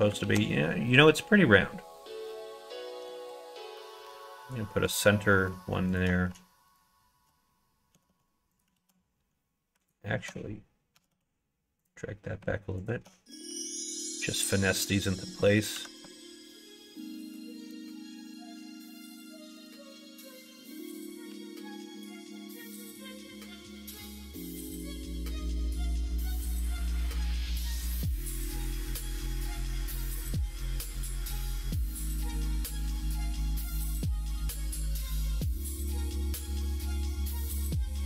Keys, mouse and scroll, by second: 0.2 ctrl+z, 0.4 click, 3.2 ctrl+r, 7.9 g, 8.7 ctrl+z, 9.8 alt+click, 10.9 g, 12.8 click, 13.4 g, 15.2 middle click, 17.6 g, 20.6 ctrl+z, 21.8 alt+click, 24.1 ctrl+b, 30.8 click, 32.0 click, 32.8 click, 34.0 alt+click, 34.4 middle click, 36.1 ctrl+b.